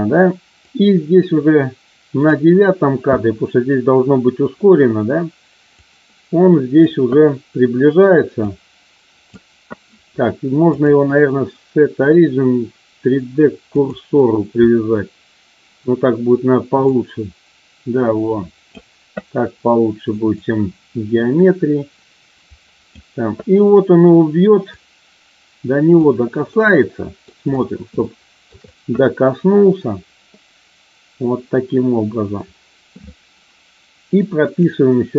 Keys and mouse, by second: 0.6-2.4 drag, 5.6-6.6 drag, 8.5 click, 10.6-13.9 drag, 16.8-18.6 drag, 20.5-22.9 drag, 24.8-25.9 drag, 26.5 middle click, 28.0-28.5 shift+middle drag, 34.4 click.